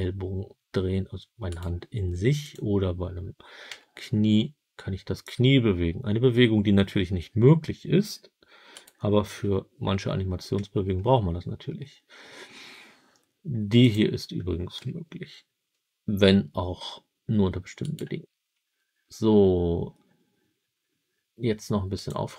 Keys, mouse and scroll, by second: 1.4 right click, 2.3 click, 3.6 g, 8.6 right click, 13.7 click, 14.7 g, 17.7 right click, 21.8 click.